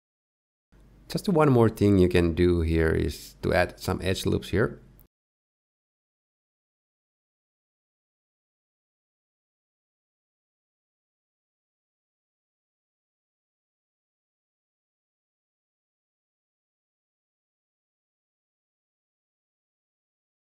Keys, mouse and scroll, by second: 0.2 middle click, 0.6 shift+middle click, 0.6-1.8 scroll down 1, 1.8 middle click, 2.1 KP_1, 3.2 ctrl+KP_3, 6.1 Tab, 7.4 ctrl+r, 9.4 ctrl+r, 11.6 ctrl+r, 13.8 ctrl+r, 17.8 middle click, 18.6 scroll down 1, 18.9 ctrl+3, 19.2 click, 19.8 middle click.